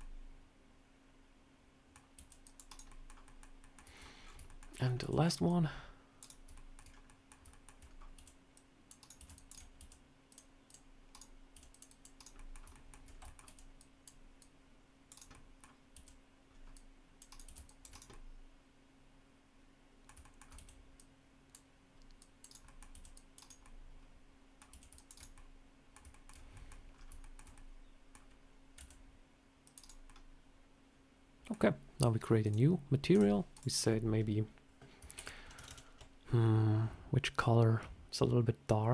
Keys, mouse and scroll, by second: 2.1 c, 2.8 middle click, 3.2 middle click, 3.5 middle click, 3.8-4.5 shift+scroll down 10, 4.4 shift+middle click, 4.5 shift+middle click, 4.7 scroll up 3, 4.9 c, 6.4 shift+middle click, 6.7 scroll down 2, 7.0 middle click, 7.4 shift+middle click, 7.8 scroll up 2, 8.1 c, 9.1 c, 9.7 c, 11.4 c, 12.3 middle click, 12.6 shift+middle click, 13.0 scroll up 2, 13.1 shift+middle click, 13.3 c, 15.2 middle click, 15.8 c, 17.4 c, 18.0 middle click, 20.1 shift+middle click, 20.5 c, 22.6 middle click, 22.8 c, 23.5 middle click, 24.6 c, 25.2 middle click, 26.0 shift+middle click, 26.2 scroll down 2, 26.4 middle click, 26.8 scroll up 2, 27.1 shift+middle click, 27.5 middle click, 28.7 c, 30.0 middle click, 32.3 click, 33.0 click, 33.4 click, 35.6 BackSpace.